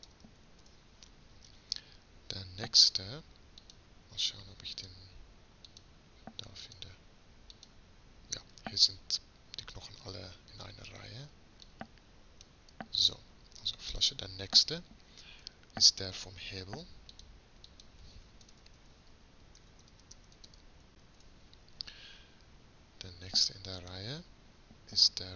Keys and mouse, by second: 3.6-9.4 drag, 9.4-10.6 middle drag, 11.7-18.6 drag, 18.6 BackSpace.